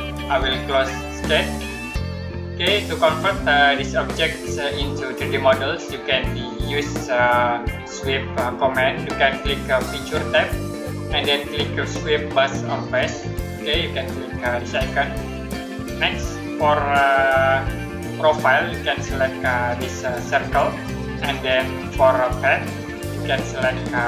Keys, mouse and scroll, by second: 1.2 click, 10.2 click, 14.6 click, 22.6 click.